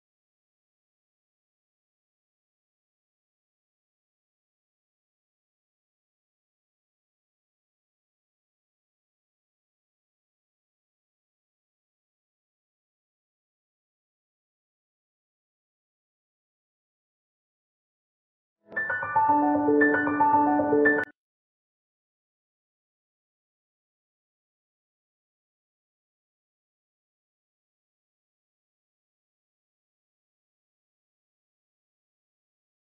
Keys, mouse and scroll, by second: 0.1 click, 3.6 click, 4.9-5.3 scroll up 1, 5.3-5.8 scroll down 1, 6.0-6.5 scroll up 1, 6.5 scroll down 1, 7.3-7.6 scroll up 1, 8.0 ctrl+z, 9.2-11.2 drag, 11.2 scroll up 1, 12.2 click, 13.8 scroll down 1, 14.3 scroll up 1, 15.1 click, 17.8 ctrl+t, 18.1 click, 19.7 scroll up 1, 22.5 click, 23.0-23.4 scroll down 1, 23.5 scroll up 1, 24.0 click, 27.1 click, 29.1 scroll up 1, 30.5-31.0 scroll up 1, 31.4 scroll down 1, 32.3 click.